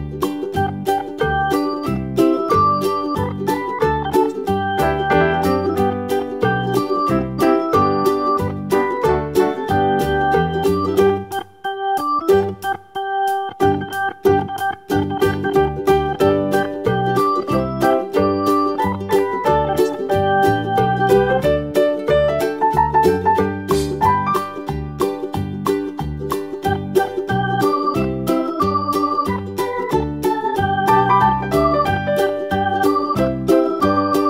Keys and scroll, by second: 0.2 BackSpace, 2.1 super+d, 8.0 super+d, 15.1 BackSpace, 18.9 super+d, 25.5 super+a.